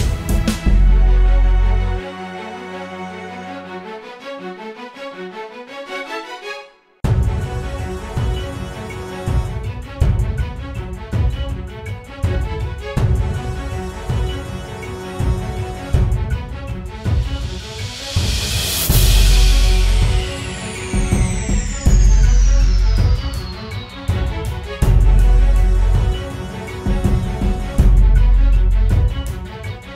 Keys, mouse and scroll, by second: 4.8-7.3 scroll down 1, 15.8 ctrl+t, 20.1 Return, 24.3-27.5 scroll up 1.